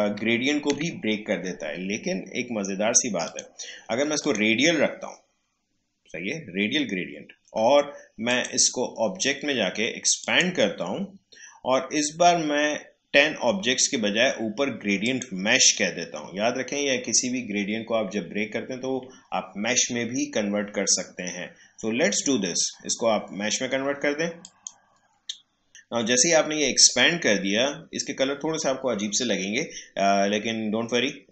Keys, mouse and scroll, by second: 0.0 ctrl+z, 6.4 click, 8.2 click, 15.0 click, 24.4 click.